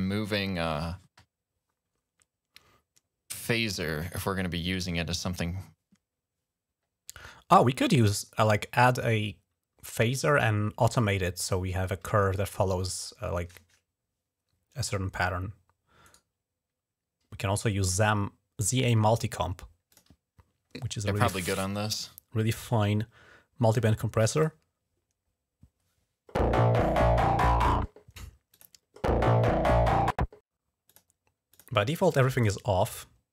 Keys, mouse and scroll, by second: 8.8 click, 16.0 right click, 19.7 click, 23.6 click, 28.3 click, 30.7 click, 31.4 click, 32.2 click.